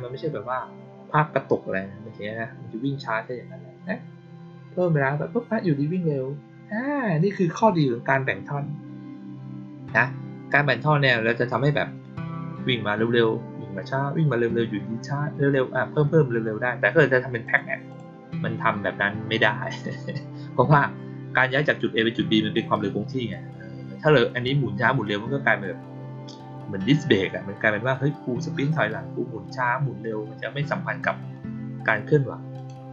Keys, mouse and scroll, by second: 17.3 click, 17.8 click, 32.4 click.